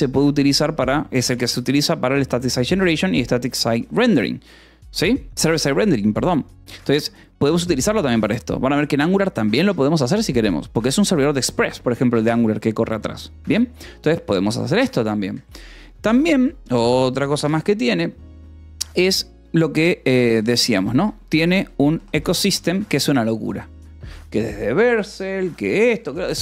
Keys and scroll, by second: 0.5 Escape, 0.9 k, 1.7 shift+v, 1.8 Escape, 2.6 j, 3.2 k, 15.8 o, 20.5-22.8 typing.